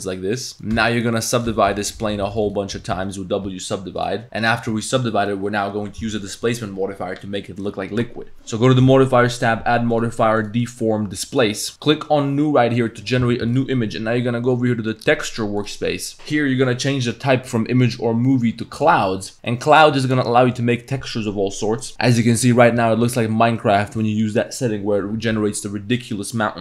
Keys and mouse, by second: 0.5 Tab, 0.5 click, 0.7-3.5 typing, 2.2 click, 4.2 Tab, 4.5 Tab, 4.5 click, 4.7 Tab, 9.3-11.5 drag, 13.6-16.6 drag, 17.1-18.9 drag, 19.5 drag, 20.0-20.6 drag, 20.7 click, 21.8 click, 23.2 middle drag, 23.3 click, 23.6 drag, 24.0 click.